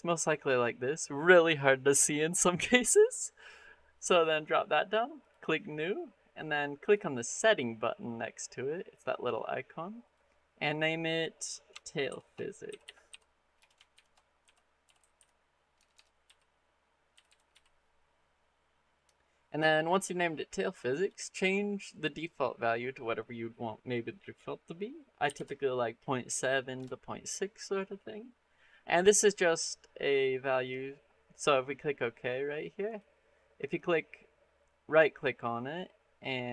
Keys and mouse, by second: 5.1 click, 6.6-32.8 drag, 15.8 BackSpace, 33.6-36.5 drag.